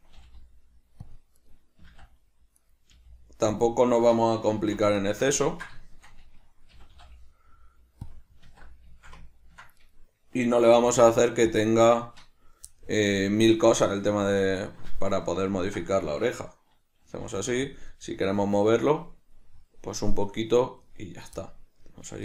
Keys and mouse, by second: 1.5 right click, 1.9 g, 2.8 right click, 3.1 g, 3.8 click, 4.0 right click, 4.6 alt+q, 5.2-8.2 shift+middle drag, 6.8 g, 8.2 click, 8.6 alt+q, 9.1 ctrl+shift+middle click, 9.9 right click, 10.8 g, 11.7 click, 12.8-17.9 middle drag, 17.3 g, 17.9 click, 18.1-22.2 middle drag.